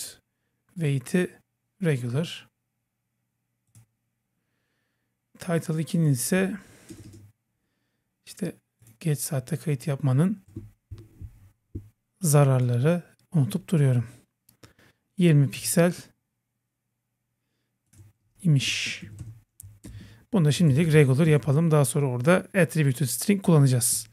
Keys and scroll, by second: 19.9 Right, 20.8 Right, 21.3 super+s.